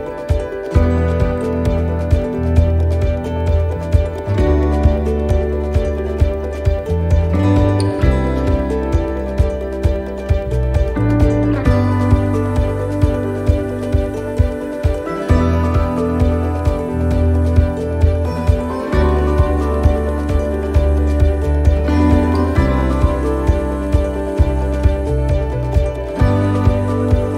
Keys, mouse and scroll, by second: 2.2 click, 2.9 middle click, 2.9-3.5 scroll up 3, 3.3 middle click, 3.6-4.3 scroll down 2, 4.1 middle click, 5.1 right click, 6.2 click, 8.3 shift+d, 9.8 click, 12.7 middle click, 13.1-13.4 scroll up 1, 14.1 scroll down 2, 15.2-15.7 scroll down 5, 15.7 middle click, 16.0-16.7 scroll up 4, 16.5 middle click, 18.2 middle click, 18.2 scroll up 1, 18.5 middle click, 19.3 shift+middle click, 19.4 shift+middle click, 19.9 middle click, 19.9 scroll up 1, 20.3 scroll down 1, 21.0 middle click, 21.0 scroll down 4, 22.0 click, 23.8 click.